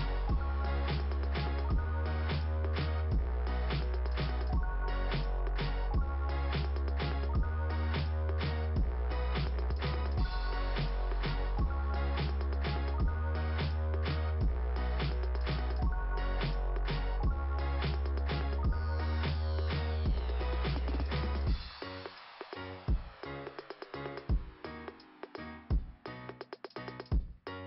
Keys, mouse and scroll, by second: 0.9 right click, 2.7 click, 11.9 click, 13.7 click, 19.0 ,, 19.8 click, 26.4 click.